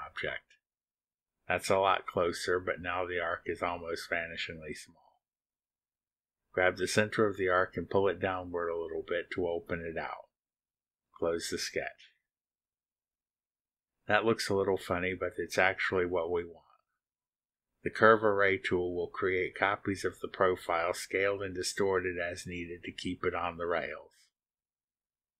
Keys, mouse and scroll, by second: 1.1 click, 3.4 click, 6.2-11.1 drag, 13.0 click, 15.2 click, 15.4-16.8 scroll down 2, 16.8-24.9 drag.